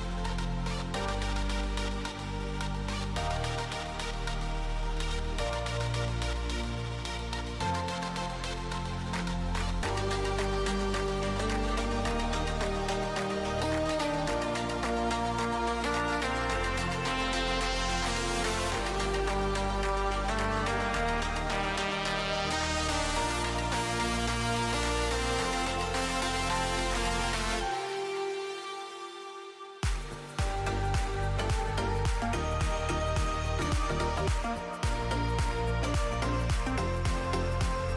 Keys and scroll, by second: 0.0-1.5 typing, 3.0-3.9 typing, 9.6-14.2 typing, 18.1-19.1 typing, 21.4 Tab, 23.0-23.8 typing, 28.8-33.1 typing.